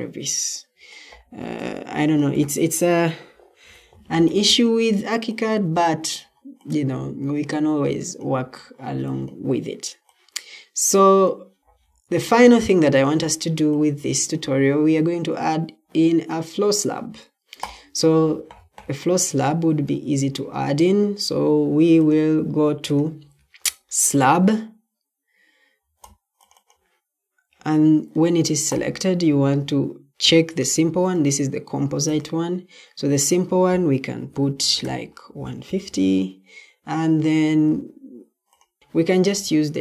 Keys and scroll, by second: 34.1-35.2 typing, 38.8 Escape.